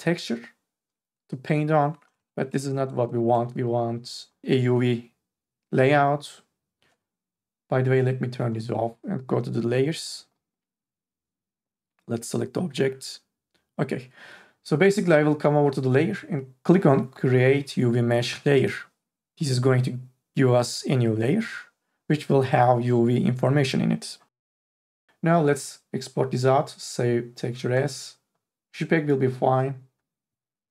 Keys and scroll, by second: 2.5 ctrl+z.